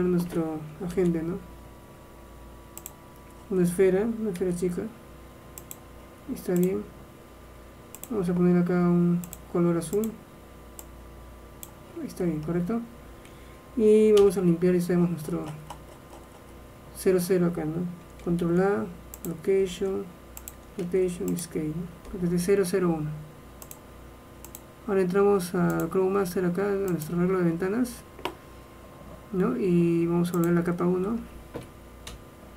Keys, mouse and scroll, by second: 1.0 shift+a, 4.6 s, 6.7-11.2 drag, 12.3-14.3 middle drag, 14.3 n, 16.4-18.6 middle drag, 18.6 ctrl+a, 19.8 ctrl+a, 20.9 ctrl+a, 23.8-25.7 drag, 25.9-27.6 drag, 30.8-32.2 drag, 32.2 KP_1.